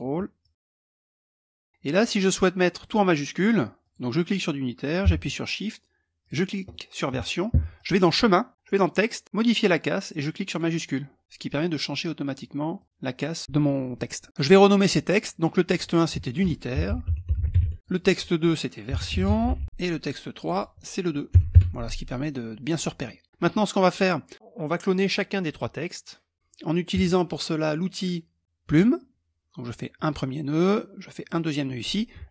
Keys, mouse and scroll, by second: 0.0 click, 3.4 click, 5.8 shift+click, 7.3 click, 10.0 click, 12.3 click, 15.2 click, 16.1-19.8 typing, 17.8 click, 19.9 click, 20.9 KP_2, 21.1 KP_Enter, 28.4 click, 29.5 click, 30.8 click.